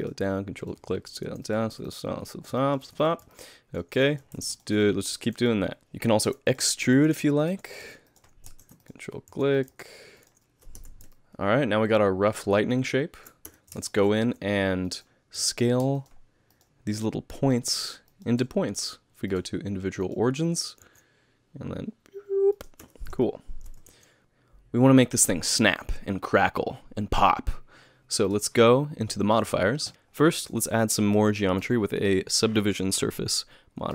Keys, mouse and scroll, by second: 0.7 ctrl+right click, 1.2 s, 1.8 ctrl+right click, 2.6 middle click, 3.0 ctrl+right click, 3.3 middle click, 4.1 middle click, 4.4 ctrl+r, 5.2 3, 5.4 click, 5.8 ctrl+z, 6.2 e, 6.9 s, 7.5 g, 7.8 r, 8.8 ctrl+right click, 9.5 s, 9.7 g, 10.3 alt+a, 10.3 middle click, 10.3 z, 10.8 Tab, 11.1 middle click, 13.5 Tab, 13.9 shift+middle click, 14.9 click, 14.9 z, 15.5 middle click, 16.0 shift+click, 16.9 click, 17.4 click, 18.1 shift+click, 19.3 click, 20.8 s, 22.8 Tab, 23.2 middle click, 23.9 alt+a, 28.3 click.